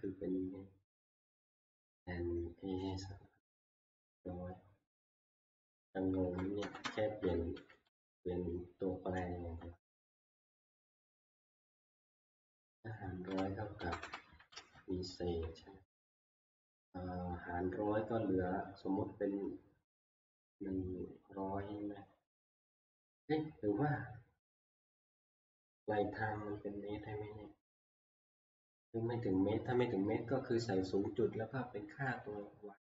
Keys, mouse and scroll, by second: 4.2-5.0 Right, 6.2 Left, 6.6 Right, 6.8 Right, 7.7 ctrl+v, 9.4 Right, 9.7 Right, 12.0-12.8 Right, 13.3 Left, 13.8 Left, 14.0 Left, 14.5 ctrl+v, 15.5 Right, 15.9-16.2 Right.